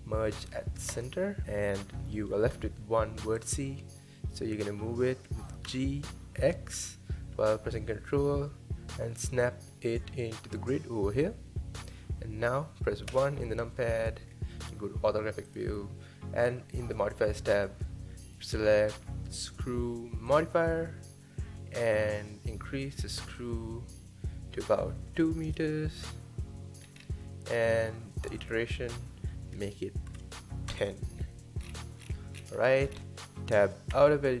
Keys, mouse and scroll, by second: 1.4-2.5 scroll up 2, 2.5 g, 4.0-5.7 middle drag, 5.7 g, 13.1 KP_1, 14.3-14.8 scroll up 2, 15.5 click, 18.2-26.2 drag, 26.8-28.4 scroll down 4, 28.4-31.6 drag, 31.6-32.8 scroll down 12, 32.8-33.9 scroll up 5, 33.9 Tab.